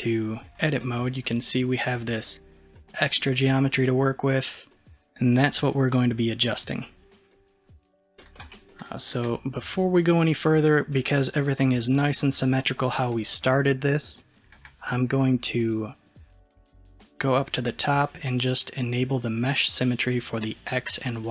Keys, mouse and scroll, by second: 0.8-7.7 middle drag, 7.7 scroll up 1, 8.2-16.3 shift+middle drag, 19.5 click, 21.2 click.